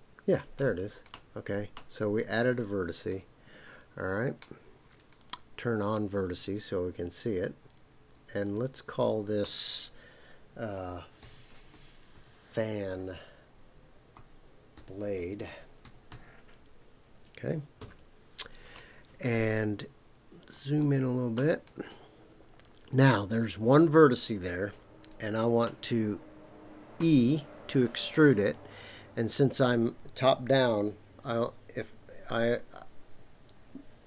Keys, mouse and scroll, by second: 5.2 click, 8.4 click, 8.6-18.7 drag, 20.1-21.1 scroll up 4, 21.1-23.1 scroll up 1, 27.0 e.